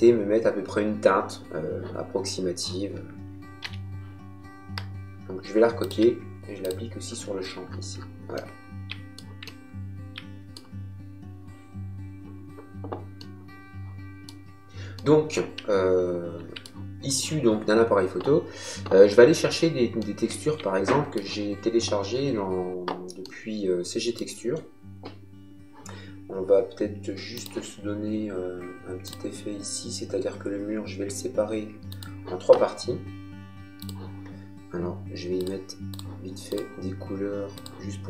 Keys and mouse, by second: 3.6 b, 5.8 alt+click, 8.3 shift+middle click, 13.2 middle click, 14.9 middle click, 19.9 shift+middle click, 23.2 middle click, 27.3 click, 29.0 click, 31.9 click, 33.8 click, 35.4 click.